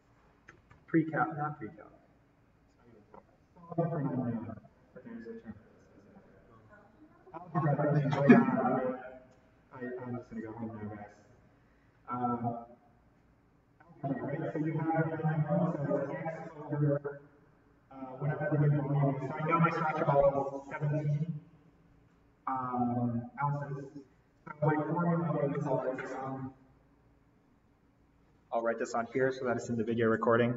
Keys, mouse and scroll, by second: 29.7 click.